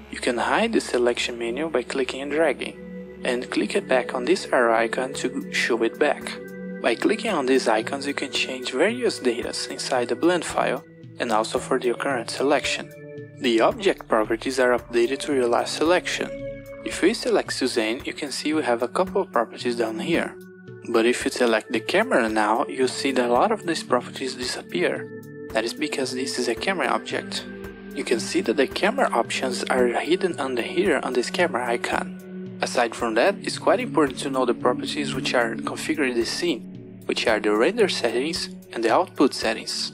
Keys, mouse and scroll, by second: 2.6 click, 7.3 click, 18.9 click, 23.6 click, 29.4 click, 36.4 click, 38.2 click.